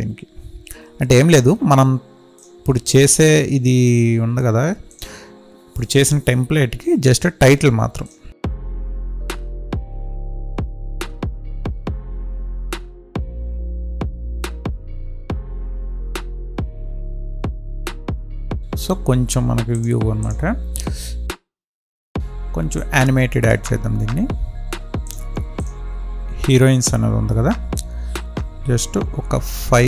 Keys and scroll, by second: 16.9 space, 29.2 Right.